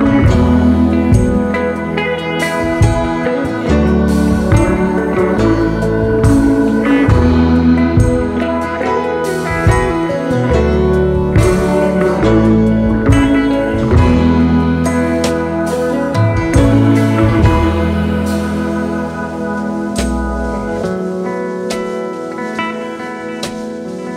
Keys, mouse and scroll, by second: 2.7-3.1 alt+scroll down 3, 3.4-4.3 space, 7.7-8.9 space, 10.4 shift+click, 15.1-15.7 space, 16.0 alt+scroll up 1, 18.3-18.6 alt+scroll down 3, 18.6 space, 19.5 shift+click, 20.3 right click, 22.4 double click, 23.0-23.7 space.